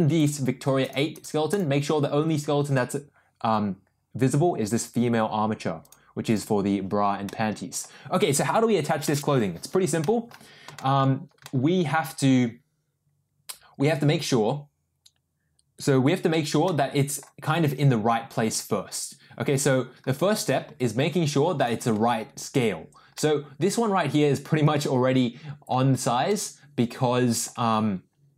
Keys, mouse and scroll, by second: 0.1 click, 0.8 click, 1.1 click, 1.5 click, 5.8 click, 7.2-7.8 middle drag, 9.0 middle click, 10.0 middle click, 10.7 shift+middle drag, 11.4-12.3 middle drag, 16.6-17.2 middle drag, 20.6 g, 22.2 ctrl+z, 23.1-25.7 middle drag, 26.2-27.4 middle drag.